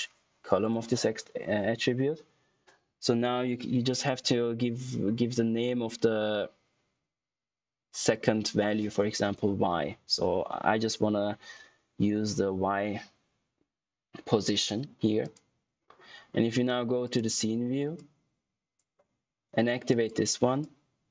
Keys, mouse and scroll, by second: 9.4 shift+y, 15.1 shift+click, 18.2 click.